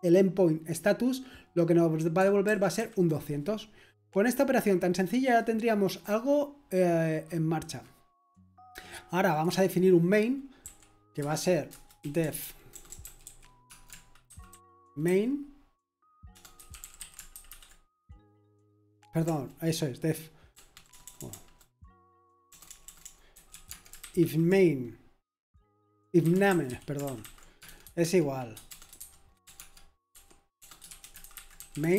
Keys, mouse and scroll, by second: 0.0-0.2 typing, 2.7 typing, 10.6 typing, 11.2 Return, 11.7 Return, 11.7-15.0 typing, 16.3-24.7 typing, 25.9-31.9 typing.